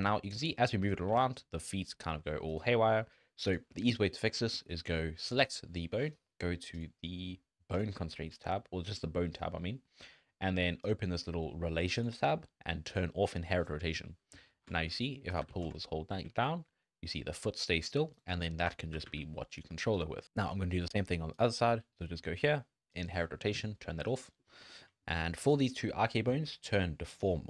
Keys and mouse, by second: 0.1 g, 1.1 g, 7.7 click, 10.8 click, 12.0 drag, 12.9 click, 15.4 g, 18.4 shift+click, 18.9 r, 22.9 click, 24.4 middle drag, 24.7 shift+middle drag, 25.1 middle click, 25.5 click, 27.1-27.4 drag.